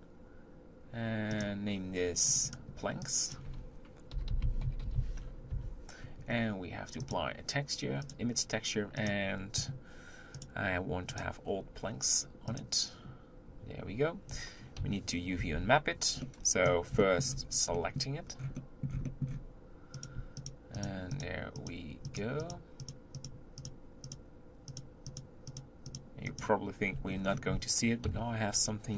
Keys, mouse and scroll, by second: 1.3 click, 2.3-5.4 drag, 7.0-9.3 drag, 14.8 KP_7, 15.4 Tab, 16.2-17.4 middle drag, 17.4-17.7 scroll up 2, 17.7 middle click, 18.3-18.7 scroll down 1, 18.7-20.0 middle drag, 20.0 click, 20.4 shift+click, 20.8 shift+click, 21.1 shift+click, 21.6 shift+click, 22.1 shift+click, 22.4 shift+click, 22.8 shift+click, 23.2 shift+click, 23.6 shift+click, 24.1 shift+click, 24.7 shift+click, 25.1 shift+click, 25.5 shift+click, 25.9 shift+click, 26.3 shift+click, 27.1-27.4 scroll down 3, 28.0 KP_7.